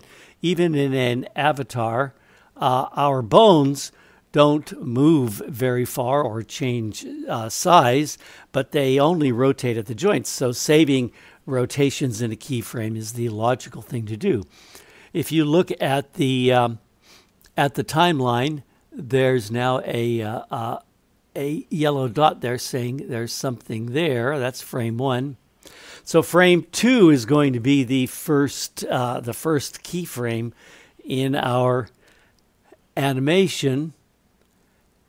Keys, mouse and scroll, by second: 23.2-24.9 drag.